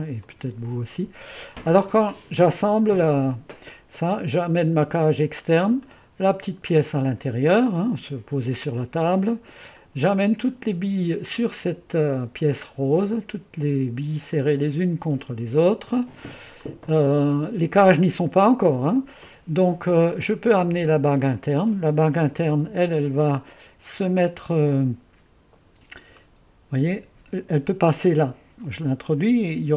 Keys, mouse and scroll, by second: 3.1-6.8 middle drag, 7.2 click, 7.7-12.4 drag, 14.4-18.2 drag, 21.4 click, 22.4 1, 22.7 2, 24.4 5, 26.3 click, 28.5 typing.